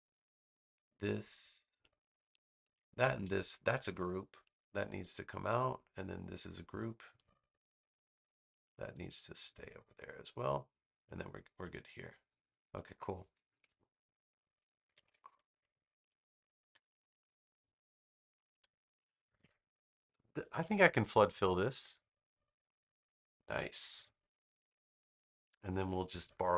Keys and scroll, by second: 3.7 super+g, 14.8 shift+Caps_Lock, 16.6 super+=, 17.7 space.